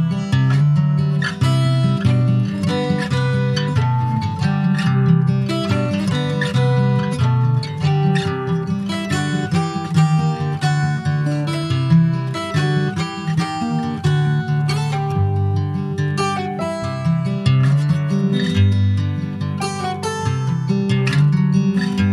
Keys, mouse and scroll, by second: 0.6 alt+middle click, 0.9 alt+middle click, 1.7 ctrl+s, 2.0-3.5 shift+middle drag, 3.5 e, 6.3 w, 6.7 s, 7.6 s, 12.1 middle click, 12.8 Tab, 13.4 Tab, 14.3 3, 14.5 click, 15.6 2, 15.8 click, 16.2 shift+click, 17.1-18.8 middle drag, 18.8 alt+shift+click, 19.3 middle click, 19.9 ctrl+b.